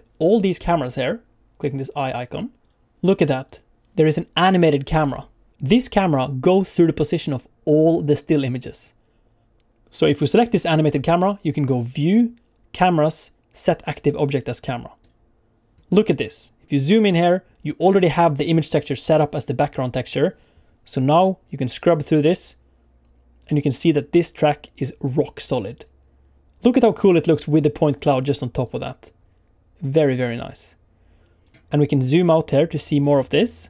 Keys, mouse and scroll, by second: 2.6 click, 3.4 click, 4.5 click, 4.8 scroll down 1, 5.0 middle click, 9.8 click, 10.0 click, 10.3 click, 11.7 click, 16.5-18.1 scroll up 3, 21.6 click, 28.6 click, 32.7 click.